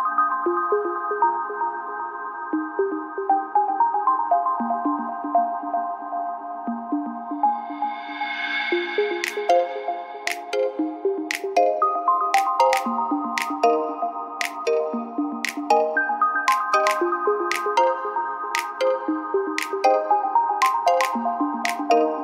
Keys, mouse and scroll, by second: 0.5 click, 0.8 w, 1.9-3.6 drag, 3.6 w, 4.5 click, 4.9 w, 5.2 a, 5.8 click, 6.2 w, 7.2 click, 7.6 w, 7.8 a, 11.5 KP_1, 12.0 KP_3, 14.2 a, 16.0 z, 16.6 a, 17.5 click, 17.9 b, 19.2-20.8 drag, 21.3 z, 22.0 a.